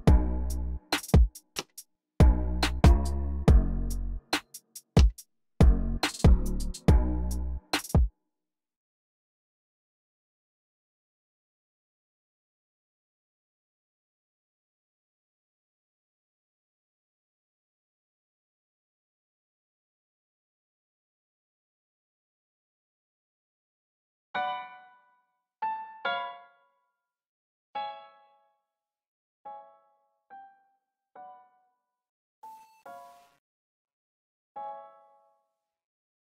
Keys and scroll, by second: 0.9 typing, 4.7 typing, 7.6 space, 8.9 ctrl+super+r, 9.2 c, 12.0 alt+super+s, 13.6 y, 23.2-24.2 typing, 27.0 e, 27.6 super+a, 29.3 x, 35.4 v.